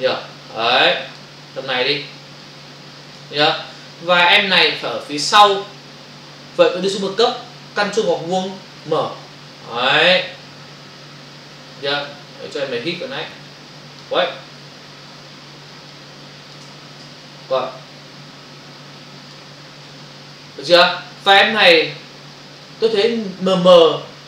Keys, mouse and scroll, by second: 2.4 shift+click, 3.7 Return, 10.5 click, 16.0 shift+click, 17.0 Return, 17.5 click.